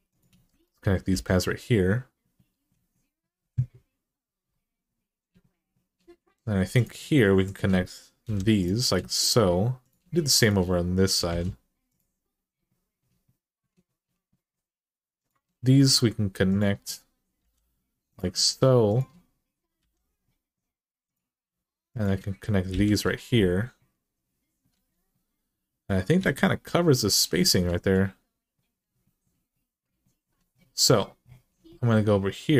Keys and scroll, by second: 0.9 j, 8.0 j, 11.1 r, 17.2 j, 19.6 j, 22.5 j, 24.5 alt+z, 26.0 alt+z.